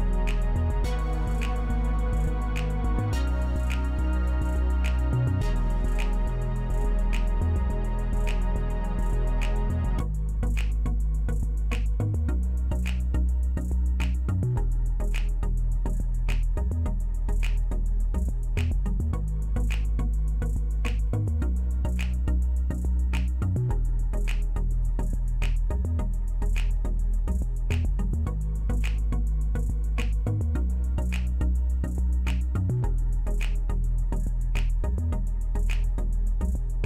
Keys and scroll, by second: 3.6-4.3 typing, 19.4-20.4 typing, 31.4-32.1 typing.